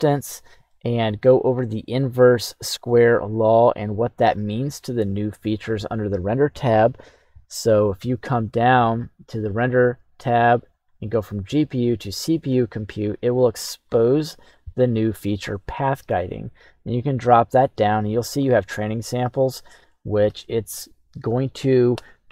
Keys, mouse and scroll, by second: 0.4 scroll down 1, 0.6 middle click, 2.0 right click, 3.0 s, 5.4 click, 8.9-10.7 scroll up 1, 10.7-11.9 drag, 13.8-15.6 scroll down 2, 15.6 click, 16.6 click.